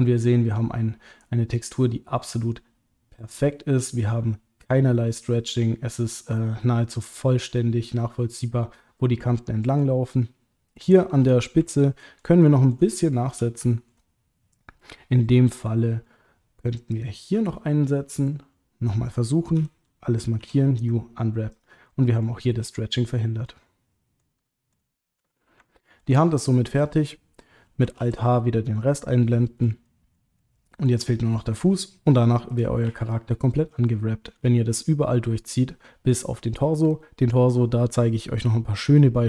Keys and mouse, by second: 6.5-9.8 middle drag, 11.6 ctrl+middle click, 12.4 middle click, 12.9 shift+middle click, 14.8-16.1 middle drag, 16.9 click, 19.6 a, 20.4 u, 21.9 middle click, 23.5 middle click, 24.5 middle click, 24.9 shift+middle click, 25.6 ctrl+middle click, 28.0 alt+h, 28.5 middle click, 29.8 middle click, 30.4 shift+middle click, 31.5 click, 32.5 click, 33.9 shift+middle click.